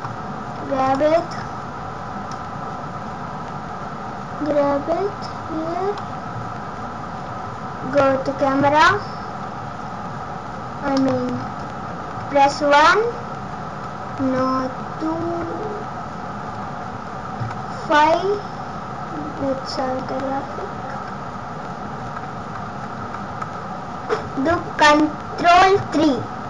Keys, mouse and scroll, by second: 0.8 click, 1.3 scroll down 1, 1.8-2.3 scroll down 5, 2.3 click, 6.4 scroll up 2, 7.4 scroll up 2, 7.9 KP_0, 10.9 scroll up 1, 10.9 middle click, 11.4 scroll down 5, 12.1 KP_1, 12.9 scroll down 3, 14.2 scroll down 3, 14.2 KP_2, 17.4 KP_5, 19.4 KP_5, 20.0 KP_6, 22.0 KP_6, 25.8 ctrl+KP_3.